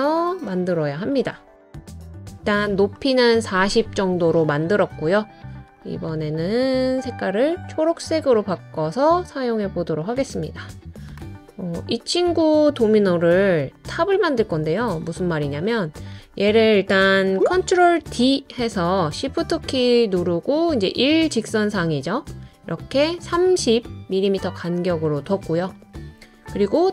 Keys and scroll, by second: 3.1 typing, 8.6 typing, 18.0 super+d.